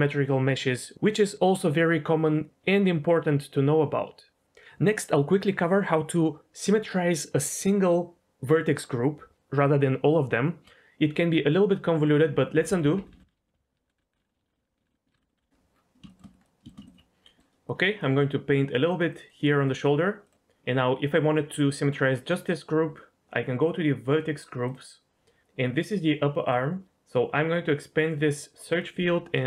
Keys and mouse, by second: 11.9 middle click, 12.5 ctrl+z, 12.7 ctrl+z, 12.8 ctrl+z, 13.0 ctrl+z, 13.1-15.3 ctrl+z, 16.1 middle click, 16.4 middle click, 16.8 ctrl+click, 17.2 middle click, 17.6 middle click, 18.7 click, 18.9 click, 19.3 click, 20.2 middle click, 24.6 click, 26.8 BackSpace, 28.1 click, 28.8-29.4 drag.